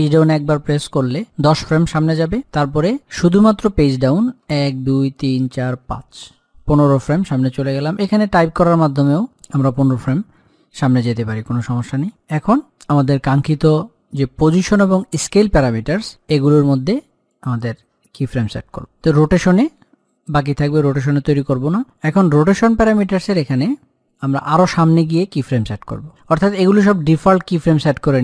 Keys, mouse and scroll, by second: 0.3 shift+Page_Down, 4.6 Page_Down, 9.0 click, 11.7 click, 17.7-28.2 drag.